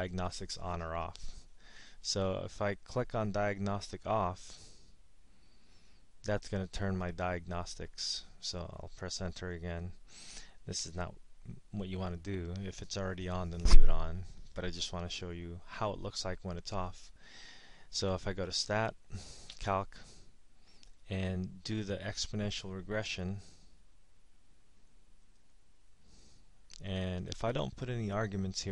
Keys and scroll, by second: 1.9 Up, 5.8 Return, 8.6 Return, 19.3 Right, 20.8 Up, 22.1 Up, 23.6 Up, 24.6 Up, 25.3 Return.